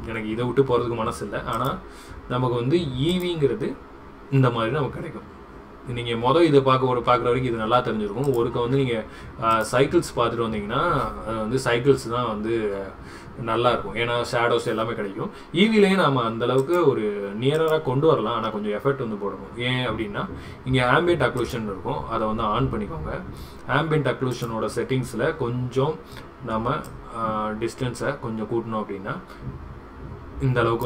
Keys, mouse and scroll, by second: 1.6-3.3 drag, 8.3-9.7 drag, 16.6-17.8 drag, 21.5 click, 24.4 click, 26.9-30.8 drag.